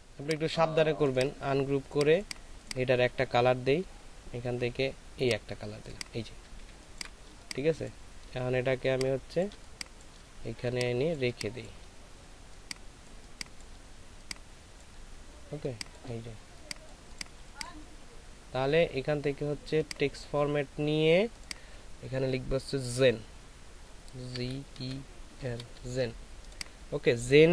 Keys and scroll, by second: 6.6 ctrl+space, 9.5 shift+space, 11.0 space, 17.3 space, 24.3 shift+z, 24.7 shift+e, 25.3 shift+n.